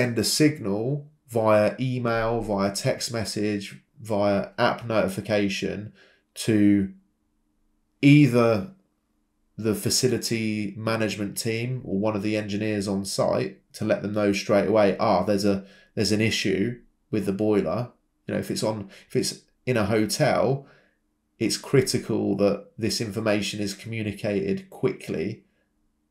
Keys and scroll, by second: 1.8 Escape, 3.9 Escape, 8.6 Escape, 11.3 typing, 11.6 Return, 14.6 typing, 15.3 Escape, 18.9 typing, 19.2 Return.